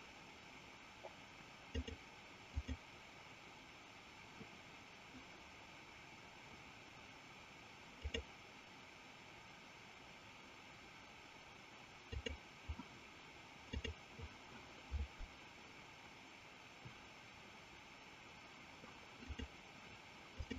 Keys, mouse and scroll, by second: 1.7 click, 7.9-13.9 drag.